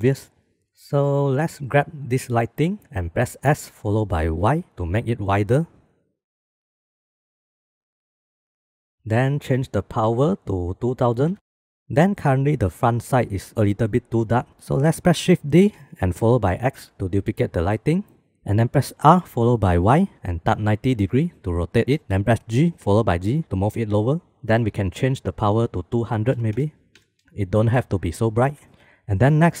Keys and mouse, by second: 0.6 ctrl+s, 2.0 click, 3.4 s, 10.4-11.7 drag, 11.3 KP_0, 14.9 shift+d, 18.7 r, 22.4 g, 25.4-28.6 drag.